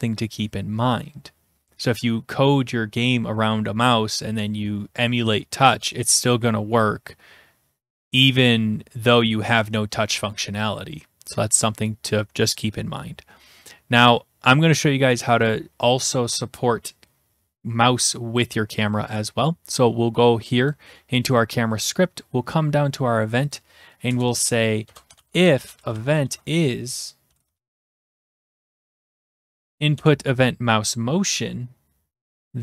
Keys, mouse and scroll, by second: 20.8 click, 21.9 scroll, 23.5 click, 24.1 Return, 24.8-29.7 typing, 30.0 Return.